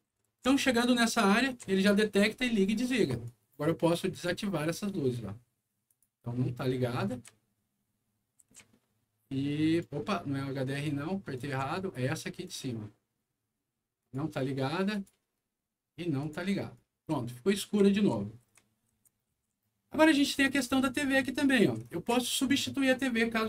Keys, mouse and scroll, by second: 0.0-1.3 typing, 1.0-2.6 right drag, 3.2 right click, 4.1 click, 5.8 click, 6.9-9.7 right drag, 7.2 a, 8.3 s, 10.7 click, 11.3 right click, 11.5 d, 12.4 click, 13.9 click, 14.9 click, 16.1 click, 16.7-19.6 right drag, 17.1-19.8 typing, 20.1 click, 21.5 right click.